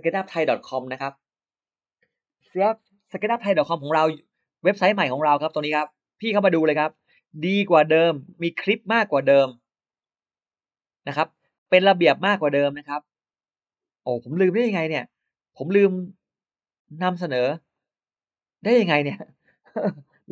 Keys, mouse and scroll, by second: 6.1-7.4 scroll down 6, 7.9-8.2 scroll down 2, 8.2-8.8 scroll up 2, 9.7 click, 11.5 click, 17.6 click.